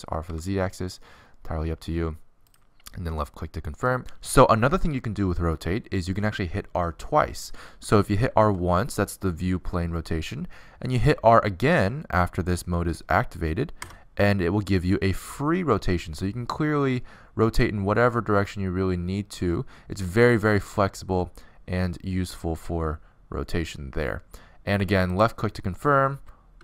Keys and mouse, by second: 9.2 r.